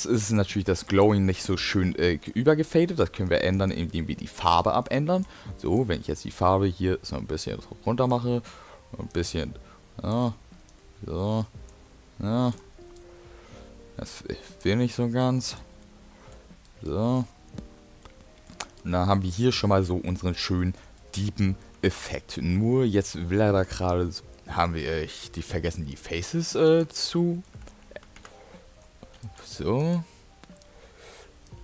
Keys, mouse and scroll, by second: 26.3 middle click, 26.7 click, 27.1 middle click, 28.3 Tab, 29.3 click, 29.8 click, 31.5 alt+click.